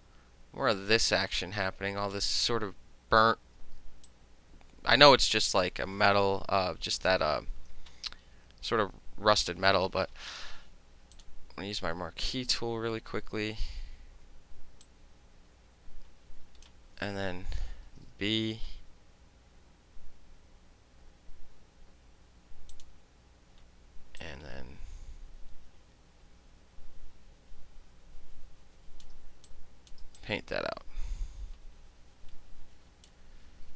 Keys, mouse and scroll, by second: 3.9 space, 4.1 click, 5.0-6.3 middle drag, 11.2 click, 14.9-16.7 drag, 17.8 b, 22.8 click, 24.3-29.1 drag, 29.2 space, 29.4 middle click, 29.6 click, 30.0 middle click, 30.3-33.1 drag, 33.1 middle click.